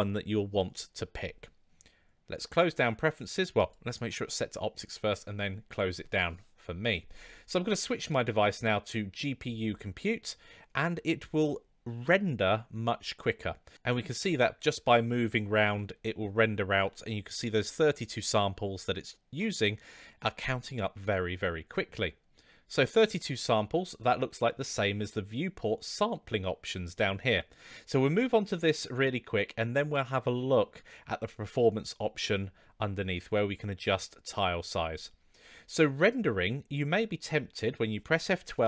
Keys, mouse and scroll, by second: 8.0-9.6 drag, 14.2-15.1 middle drag, 16.8-17.4 middle drag, 20.4-21.7 middle drag.